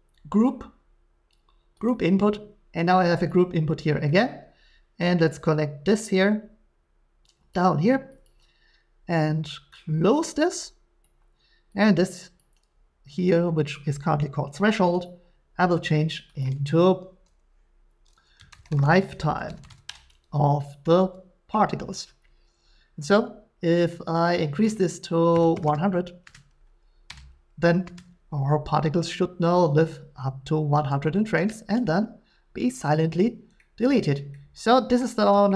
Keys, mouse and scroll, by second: 1.8 click, 3.3 click, 4.2 middle click, 7.5 click, 8.2 click, 10.2 click, 11.0 click, 12.4 click, 15.0 click, 16.4 click, 18.4-19.8 typing, 22.5-25.5 typing, 24.6 click, 26.7-29.7 drag, 27.1 Return, 33.8 shift+middle click, 34.3 middle click, 35.2 middle click.